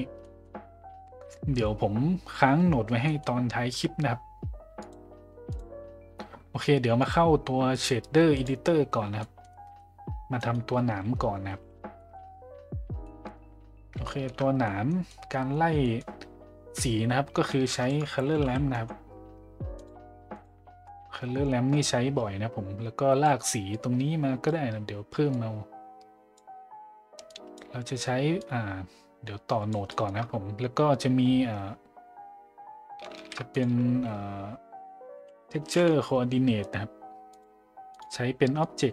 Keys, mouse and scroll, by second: 0.2 middle click, 3.0 middle click, 4.8-5.6 drag, 7.1-8.5 drag, 9.2 middle click, 9.5 middle drag, 11.9 middle click, 11.9 a, 13.0 middle click, 14.0 shift+middle drag, 14.6 middle click, 15.1-15.5 middle drag, 15.8 middle click, 17.5 shift+a, 21.7-23.2 drag, 23.8 click, 25.3-26.4 drag, 27.3 click, 28.4-29.7 drag, 29.9 middle click, 33.2 shift+a, 38.6 click.